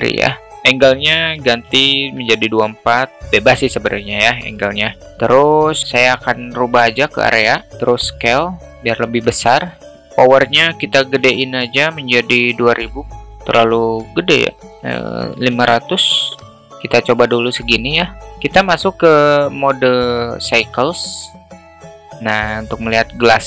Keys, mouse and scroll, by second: 0.5-1.9 drag, 6.4 click, 7.7 s, 12.4 click, 12.4 0, 12.6 0, 13.4-16.5 drag, 15.4 0, 17.2-18.2 alt+middle drag.